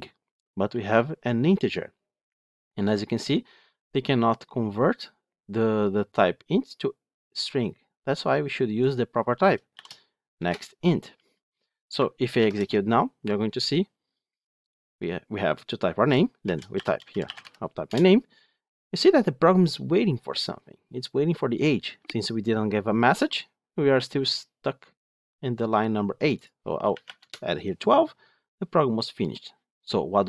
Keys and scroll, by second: 10.3 Return, 12.2 ctrl+shift+F10.